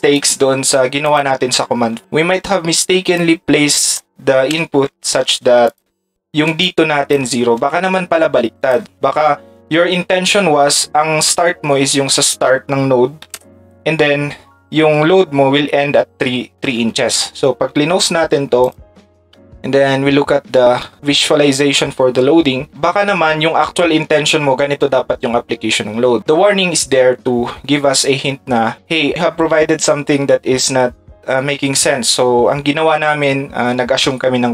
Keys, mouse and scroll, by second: 0.1 click, 5.7 ctrl+click, 6.6 ctrl+click, 13.3 space, 16.6 ctrl+s, 17.6 ctrl+s, 17.8 ctrl+s, 17.9 ctrl+s, 18.6 click.